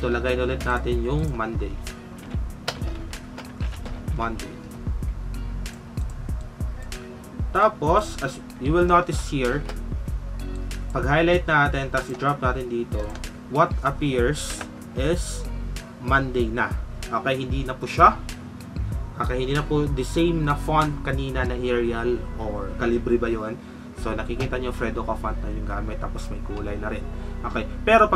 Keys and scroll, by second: 2.8-4.6 typing, 9.3 shift+F5.